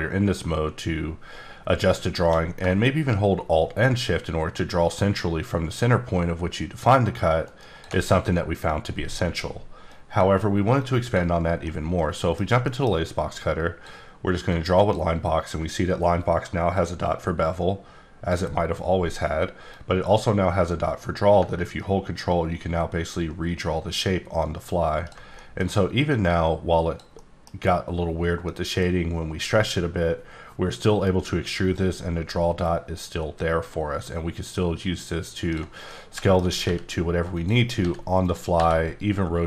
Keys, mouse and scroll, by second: 7.4 alt+shift+right click, 11.6 right click, 11.9 middle click, 12.6 middle click, 12.9 scroll up 3, 13.3 click, 14.5 click, 14.8 right click, 16.7-18.6 drag, 19.7-25.3 drag, 25.4 middle click, 26.3 click, 27.1 middle click, 31.7 click, 35.9 middle click, 36.6 g, 37.3 click, 37.8 g, 38.2 click.